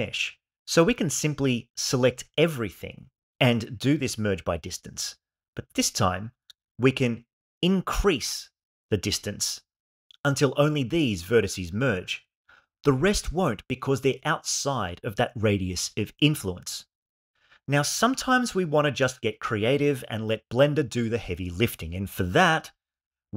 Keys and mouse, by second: 3.1 a, 4.9 m, 7.1-9.7 shift+drag.